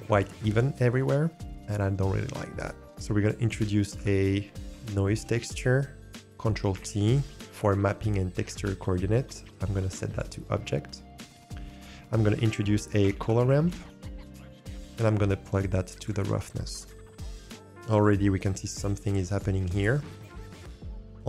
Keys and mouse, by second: 1.3 shift+click, 1.3 shift+middle click, 2.2-2.7 ctrl+middle drag, 2.7 ctrl+click, 2.9 Delete, 3.5 shift+a, 6.9 ctrl+t, 9.7-10.2 drag, 12.0 shift+a, 15.0-16.0 drag, 16.9-17.5 drag, 17.5 n, 18.4 click, 18.9 click, 19.1 click, 20.0 middle click.